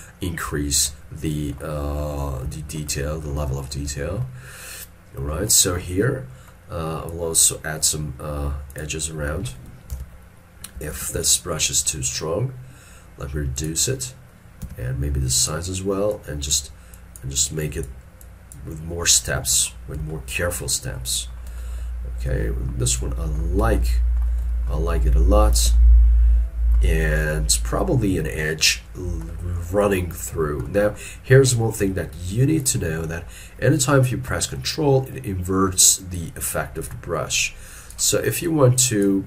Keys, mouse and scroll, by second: 0.5 scroll down 1, 0.6 shift+middle click, 2.5 middle click, 4.0 shift+middle click, 5.5 scroll down 1, 5.6 shift+middle click, 6.0-6.4 scroll up 1, 10.0 ctrl+z, 11.0 shift+f, 14.7 f, 19.4 middle click, 20.4 shift+middle click, 21.7 shift+middle click, 23.0 shift+middle click, 23.6 middle click, 24.5 shift+middle click, 24.9 shift+scroll down 1, 25.8 ctrl+middle click, 29.3 middle click, 36.2 ctrl+click, 38.5 ctrl+click.